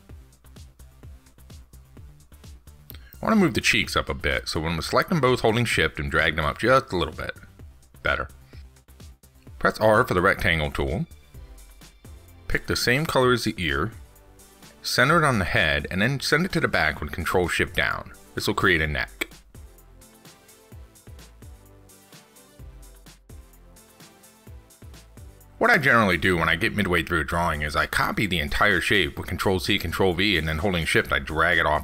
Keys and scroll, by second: 4.0 ctrl+z, 7.5 ctrl+s, 17.6 ctrl+shift+Down.